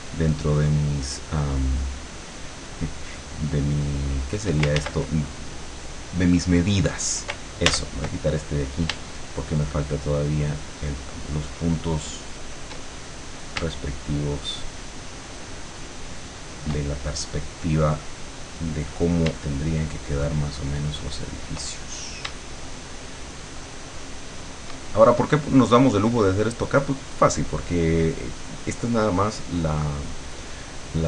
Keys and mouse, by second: 0.5-4.6 shift+drag, 4.8 ctrl+shift+z, 7.7 ctrl+z, 9.9-12.7 shift+drag, 14.1-16.9 shift+drag, 19.7-21.7 shift+drag, 22.7-24.9 shift+drag.